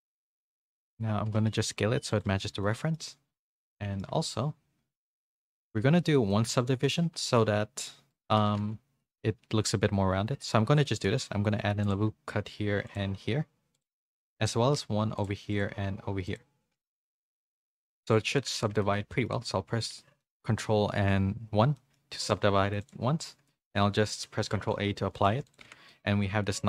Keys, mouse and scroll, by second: 0.3 z, 0.7 shift+middle click, 1.2 s, 2.4 z, 2.6 middle click, 3.4 shift+middle click, 3.6 middle click, 4.1 Tab, 4.9 KP_2, 5.1 KP_3, 5.6 z, 6.3 shift+middle click, 6.7 Tab, 7.1 ctrl+r, 8.5 ctrl+z, 10.4 ctrl+r, 17.0 ctrl+r, 17.0 ctrl+z, 17.4 ctrl+r, 18.2 z, 18.7 Tab, 18.9 middle click, 19.8 ctrl+1, 20.2 middle click, 21.7 middle click, 22.8 click, 23.6 ctrl+a, 25.1 ctrl+a, 25.4 click, 25.6 Tab, 25.9 middle click.